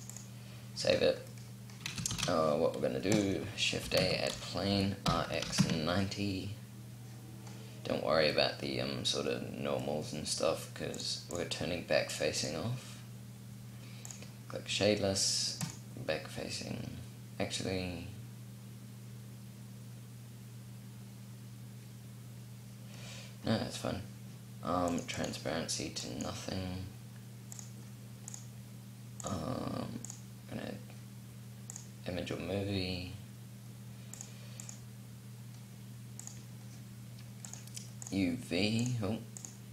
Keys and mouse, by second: 0.7-1.9 middle drag, 1.9 shift+a, 3.6 g, 4.5 r, 5.1-6.1 drag, 13.7-16.8 drag, 24.7-32.8 drag, 33.9-39.7 drag.